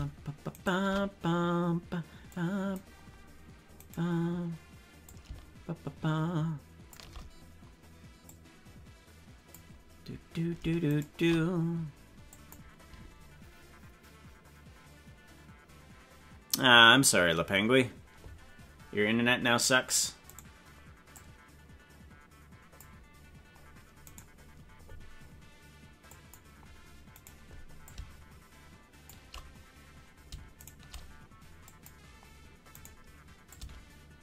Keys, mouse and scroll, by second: 0.6 shift+right click, 2.3 click, 3.9 right click, 5.0-7.0 shift+drag, 8.2-9.5 drag, 10.9 shift+right click, 12.3 click, 20.4 right click, 21.1-22.9 drag, 24.1 right click, 26.1 click, 27.2 right click, 27.8-29.0 shift+drag, 30.7 shift+right click, 31.7 click, 32.8 right click, 33.5-34.2 shift+drag.